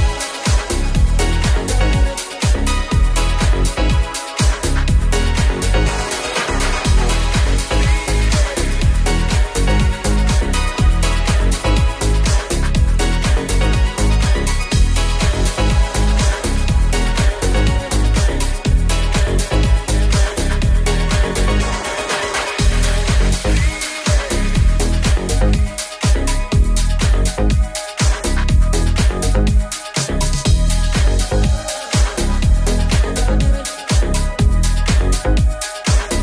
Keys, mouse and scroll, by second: 0.0 ctrl+r, 4.4 s, 4.6 ctrl+b, 8.7 alt+click, 12.5-18.4 middle drag, 18.4-24.2 drag, 18.4 s, 24.2-36.2 middle drag, 27.1 ctrl+r, 31.7 alt+right click, 32.3 ctrl+b, 35.5 Tab.